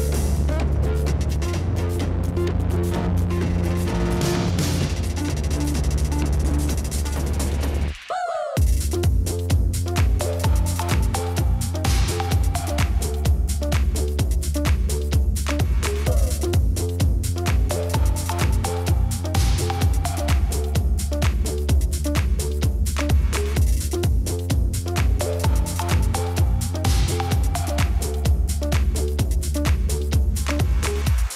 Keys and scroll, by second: 0.0-2.2 typing, 3.9 ctrl+d, 7.1 7, 8.4 0, 12.0 ctrl+z, 16.5 7, 17.6 6, 18.1 6, 19.4 4, 26.8 ctrl+d, 29.0 ctrl+d.